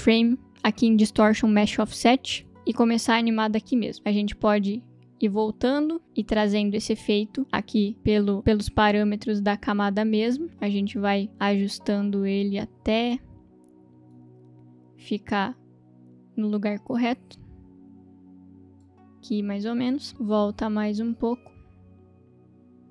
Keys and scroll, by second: 3.9 u.